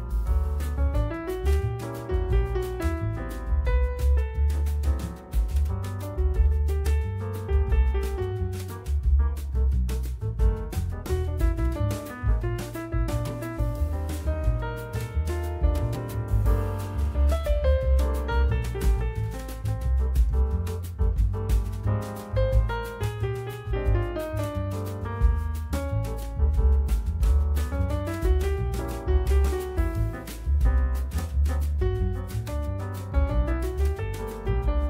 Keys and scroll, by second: 10.6 F4, 13.6 F4, 15.0 F4, 16.7 F4, 18.5 F3, 20.0 F3, 23.5 F3, 24.9 F3, 32.9 F3, 34.1 F3.